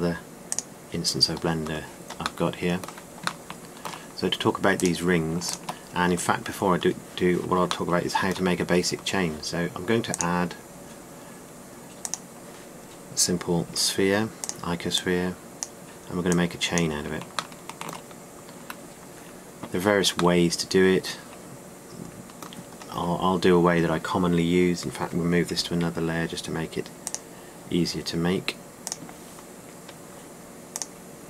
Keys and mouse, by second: 4.8-6.4 right drag, 7.3 right click, 11.1-13.5 drag, 15.4 s, 20.1 shift+middle drag, 29.3 m.